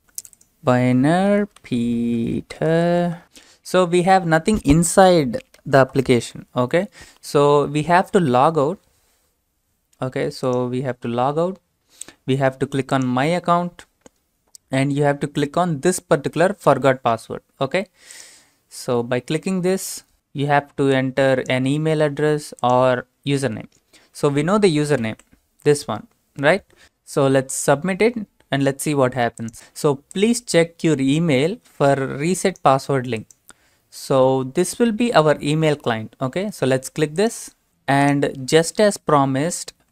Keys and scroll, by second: 1.1-3.2 typing, 25.0 ctrl+v.